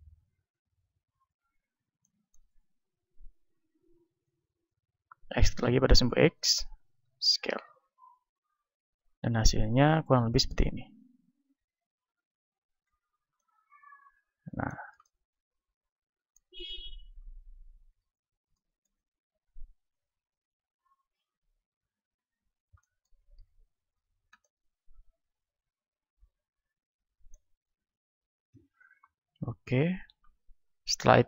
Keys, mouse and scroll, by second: 2.8-4.2 middle drag, 5.4 e, 7.0 s, 11.5 s, 12.3-14.2 drag, 12.9 z, 14.2-17.0 middle drag, 16.6 KP_1, 17.4 middle click, 18.0 z, 18.4-20.0 middle drag, 19.4 s, 20.0-23.0 drag, 23.0-26.0 middle drag, 23.4 z, 28.0-29.6 middle drag, 29.3 KP_1, 30.8-31.2 middle drag.